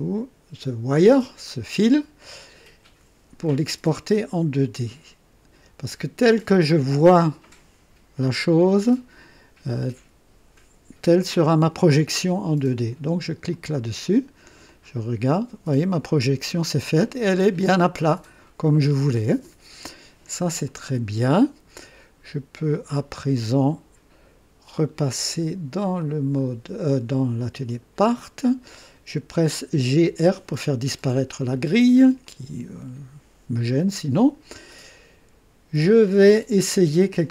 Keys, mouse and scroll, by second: 13.5 click, 14.6-16.2 drag, 16.5-20.4 drag, 20.6-22.1 drag, 25.9 click, 27.6 click, 29.6-30.5 typing, 31.4 right click, 32.2-35.0 drag.